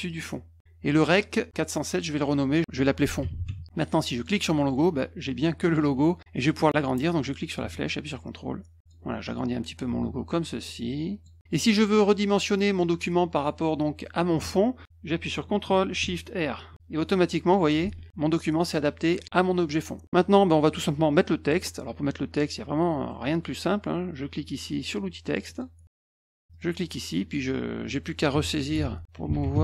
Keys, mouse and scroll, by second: 0.0 click, 1.8 click, 2.1 click, 3.2 typing, 4.1 click, 7.0-8.8 drag, 9.2-9.7 drag, 10.6 click, 11.9 click, 16.7 ctrl+shift+r, 17.1 click, 17.8 ctrl+z, 20.8 middle click, 23.1 middle click, 25.4 click, 26.5 click, 28.3-29.6 typing.